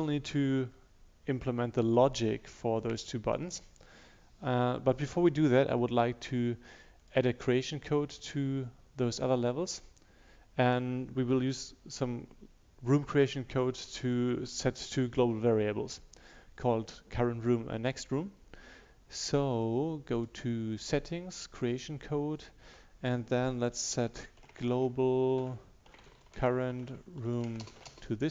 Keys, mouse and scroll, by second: 24.3-28.3 typing.